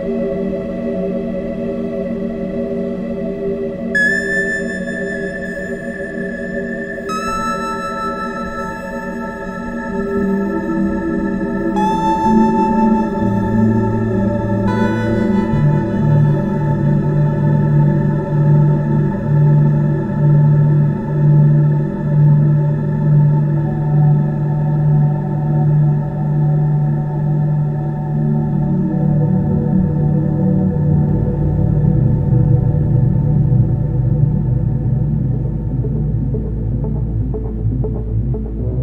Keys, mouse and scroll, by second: 0.4 shift+f, 10.4 click, 13.1 click, 17.1 click, 18.4 click, 22.0 click, 23.8 click, 25.3 click, 27.4 click, 28.4 click, 34.3 click, 35.0 click, 36.3 click, 36.9 click, 37.5 click.